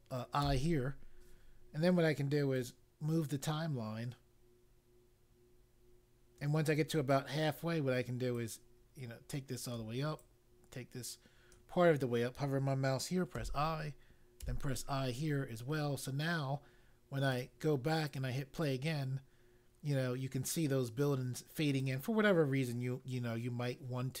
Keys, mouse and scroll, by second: 0.3 i, 2.5 right click, 8.3 click, 10.2 click, 13.3 i, 14.3 i, 17.3 click, 18.0 click, 21.7 click.